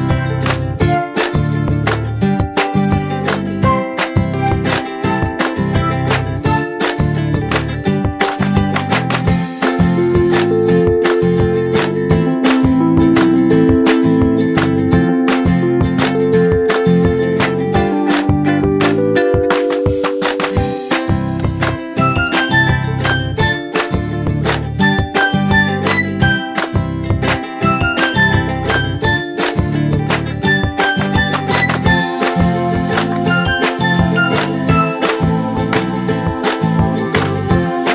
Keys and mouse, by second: 1.9 click, 3.7 click, 5.7 click, 7.7 Down, 9.1-12.6 drag, 13.9 ctrl+d, 15.1-15.9 drag, 22.1 m, 23.5 click, 25.1-26.4 drag, 28.6 Up, 30.6 click, 31.9 Up, 32.6 click, 33.6 Up, 34.6-35.2 drag.